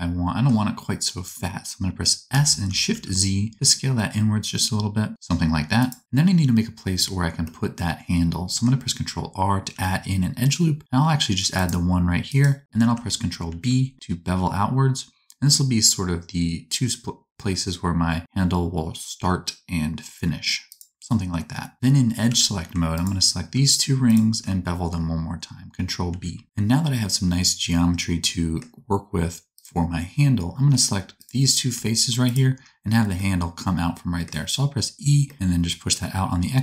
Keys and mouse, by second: 2.3 s, 5.8-8.3 middle drag, 9.7 ctrl+r, 13.4 ctrl+b, 16.4-23.0 middle drag, 22.2 2, 23.0 alt+click, 23.5-36.6 alt+shift+middle drag, 26.0 ctrl+b, 30.7 3, 34.9 e.